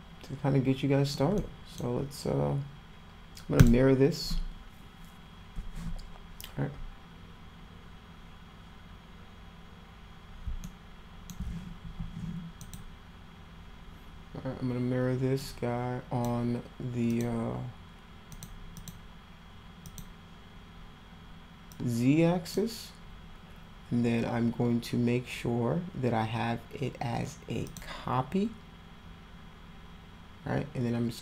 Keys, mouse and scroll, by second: 1.3 middle click, 10.6 alt+middle click, 11.9 w, 12.6 click, 15.4-16.2 drag, 17.1 click, 18.3 click, 18.7 click, 19.9 click, 21.7-22.5 drag, 27.6 click.